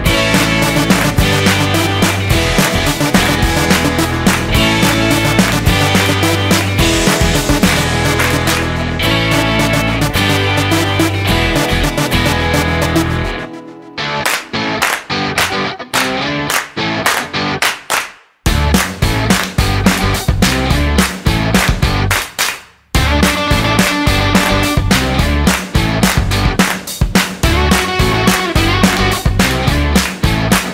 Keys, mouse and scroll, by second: 2.8-3.4 scroll down 5, 3.4 middle click, 4.1 middle click, 7.9 ctrl+shift+click, 12.0 click, 12.6 click, 13.9 click, 14.6 click, 14.7 middle click, 14.9 shift+a, 20.6 click, 23.1 click, 24.4 click, 25.0 click, 25.8 click, 26.7 click, 27.3 click, 28.4 click.